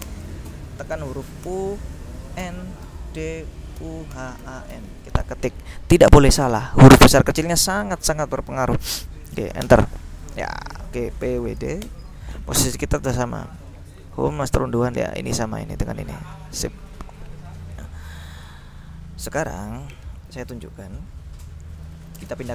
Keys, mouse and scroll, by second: 0.1 space, 1.5-5.3 typing, 9.7 Return, 11.1-12.1 typing, 13.7-15.2 drag, 18.2 click, 21.7-22.5 typing.